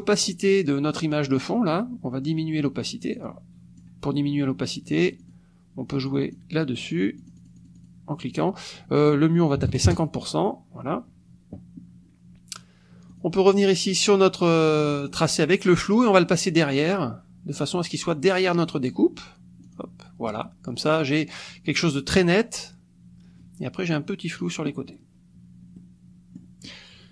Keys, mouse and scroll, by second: 3.2 click, 5.2 click, 6.1 click, 7.2 click, 8.8 click, 9.6 KP_5, 9.7 KP_0, 9.9 KP_Enter, 13.1 click, 19.6 click, 25.8 middle click.